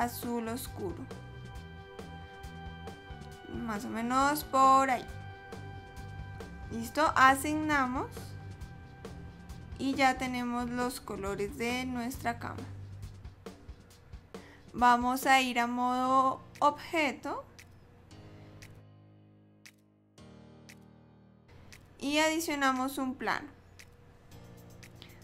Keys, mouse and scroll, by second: 7.8 click, 9.5 click, 15.2 click, 21.6 click.